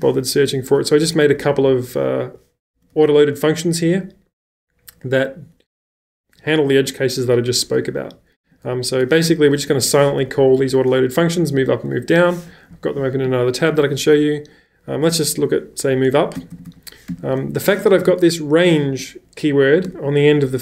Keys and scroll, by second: 1.1-1.7 typing, 2.9 typing, 8.4-10.7 typing, 12.2-13.2 typing, 15.0 k, 16.1-18.8 typing, 19.9 shift+n.